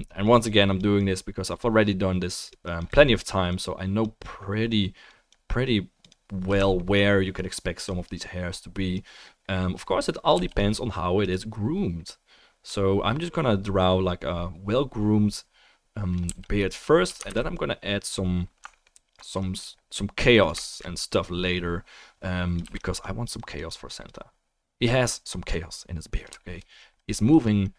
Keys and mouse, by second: 0.2-3.0 drag, 3.2 click, 3.2 middle click, 3.2 right click, 6.7-7.7 alt+middle drag, 10.3 f, 10.5 click, 16.3 f, 16.6 click, 17.3 ctrl+z, 18.7 alt+click, 18.7 alt+middle click, 18.7 alt+right click, 19.9 middle click, 22.6 f, 23.0 click.